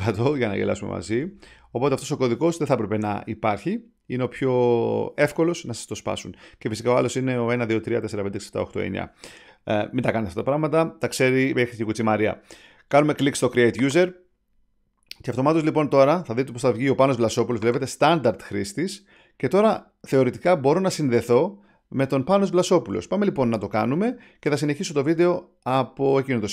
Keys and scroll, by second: 0.0-1.9 typing.